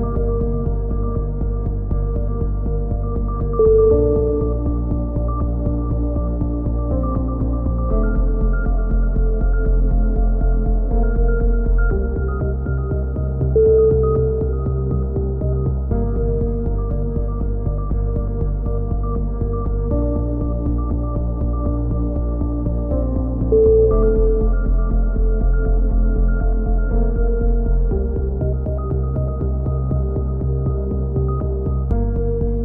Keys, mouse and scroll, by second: 0.5-1.7 right drag, 1.7 z, 4.7-6.2 middle drag, 7.2 z, 7.9-8.9 middle drag, 8.9 z, 9.6 z, 10.7-12.3 middle drag, 11.3 z, 12.3 click, 14.1 z, 14.7 click, 15.3 right click, 15.3 z, 16.3 c, 16.7 right click, 17.7 ctrl+z, 20.6 z, 21.2 a, 21.5 z, 22.6 z, 24.4-26.4 middle drag, 26.4 z, 29.6-30.9 drag, 32.4-32.6 middle drag.